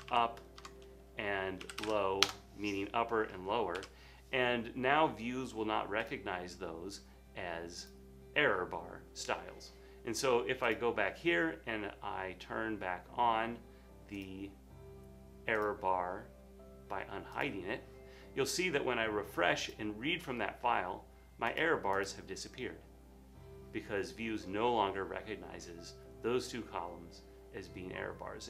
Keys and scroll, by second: 0.0-2.4 typing, 3.9 super+s.